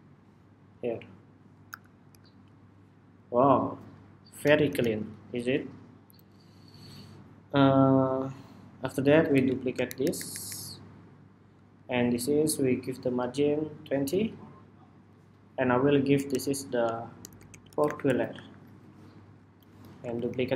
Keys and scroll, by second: 0.5 alt+Down, 1.9 super+-, 2.8 super+-, 4.4 super+=, 5.7 super+=, 9.0 super+d, 10.4 super+d, 18.7 Escape, 19.4 super+d.